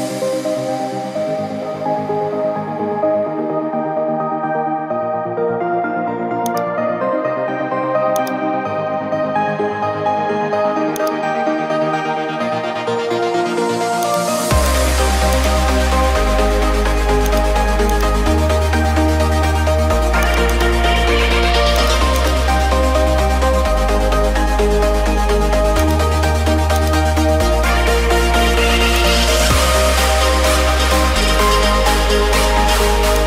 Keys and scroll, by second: 0.3 Delete, 4.4 ctrl+d, 12.7 Return, 24.3 ctrl+t, 30.4 Up, 30.5 Up, 30.7 Up, 30.8 Up, 31.1 Left, 31.6 Left, 31.7 Left, 32.2 Left.